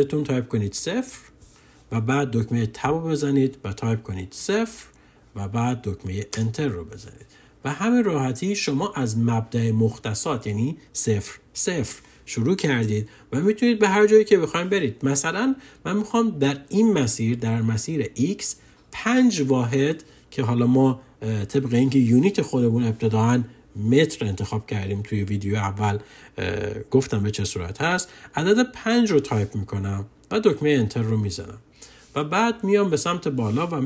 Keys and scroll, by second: 0.6 0, 2.7 Tab, 4.2 0, 6.3 Return, 28.7 5, 30.5 Return.